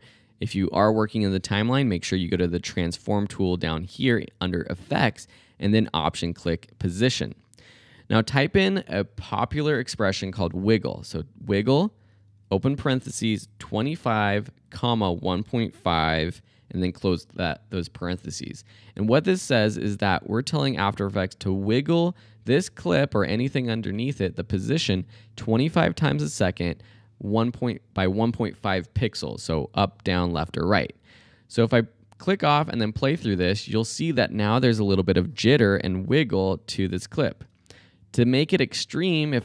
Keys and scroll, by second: 8.3 w, 8.6 i, 10.0 g, 10.3 l, 11.4-16.8 typing, 32.7 space, 37.5 space, 39.3 Left.